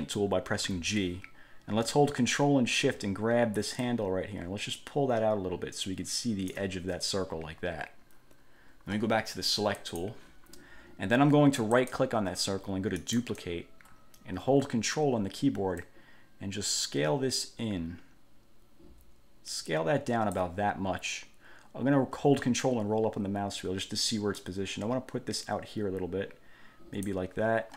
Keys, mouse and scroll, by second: 0.8 g, 4.0-6.8 ctrl+shift+drag, 9.9 click, 11.9 click, 13.2 click, 16.0-20.8 ctrl+drag, 23.0-23.6 ctrl+scroll up 2, 24.6-27.4 drag.